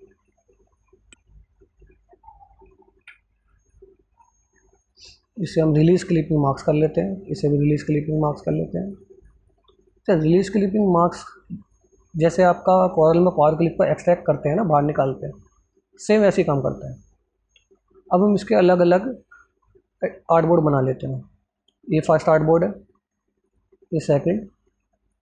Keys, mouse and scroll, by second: 1.2-2.6 ctrl+alt+scroll down 2, 2.6 ctrl+alt+scroll up 2, 3.3 click, 3.9 click, 9.1-10.9 drag, 21.5 click, 23.3 click.